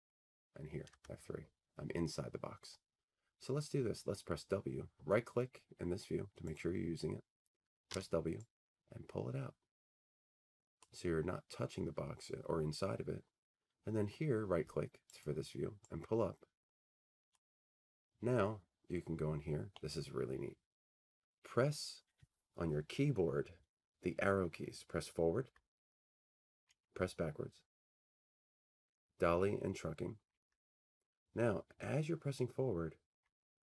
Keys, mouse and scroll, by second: 0.4-0.8 scroll, 6.7-8.8 right drag, 7.9 w, 10.8-13.2 drag, 15.3-17.4 right drag, 17.4-19.6 drag, 20.2-22.2 middle drag, 26.1-27.1 scroll up 21, 27.1-28.1 scroll down 16, 28.1 scroll, 29.4-30.0 Left, 30.0 Left, 30.2 Left, 30.5 Left, 30.5-31.3 Right.